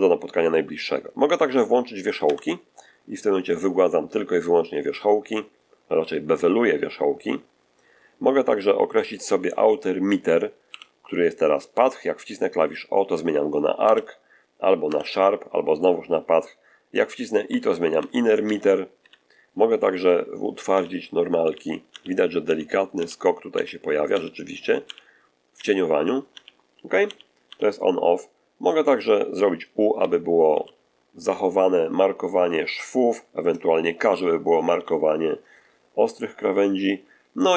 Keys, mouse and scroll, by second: 2.1 v, 10.6 o, 13.7 o, 14.8 o, 17.4 i, 17.9 i, 18.3 i, 20.6 h, 21.3 h, 21.8 h, 29.9 u, 30.4 u, 34.1 k, 34.7 k.